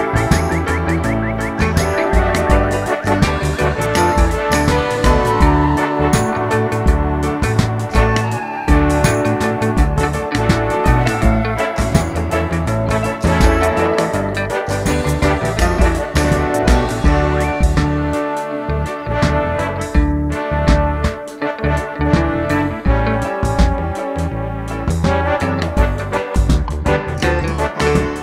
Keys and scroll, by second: 4.4-5.8 typing, 5.2 scroll up 1, 18.9 Tab, 26.3 typing, 26.5 Return.